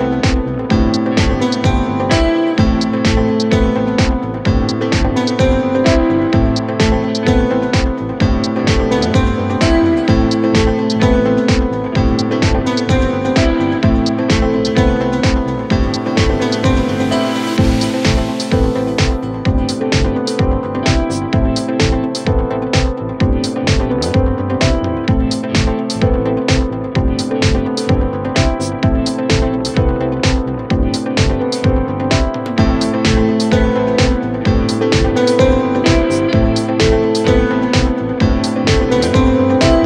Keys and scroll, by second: 0.4 3, 1.0 4, 2.5 ctrl+z, 3.6 1, 5.2 ctrl+z, 5.5 shift+i, 6.9 4, 13.3 1, 28.1 4, 31.0 ctrl+z.